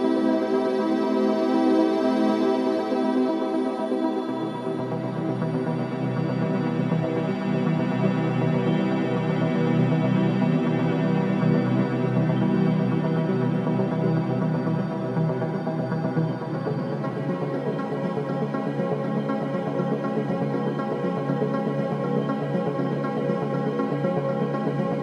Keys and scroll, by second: 3.1 ctrl+alt+shift+KP_3, 6.0 v, 6.9 c, 11.8 shift+space, 13.1 v, 13.4 space, 14.5 KP_0.